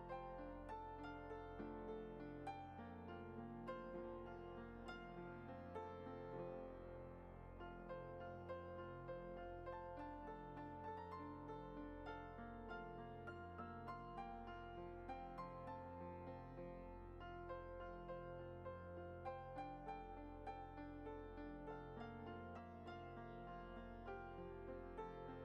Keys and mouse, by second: 0.0 ctrl+b, 6.0 click, 7.3 shift+click, 7.7 shift+middle drag, 8.6 shift+click, 10.2 i, 12.7 middle click, 13.5 e, 16.1 click, 20.0 click, 20.4 shift+middle drag, 20.8-21.3 middle drag, 21.7 e.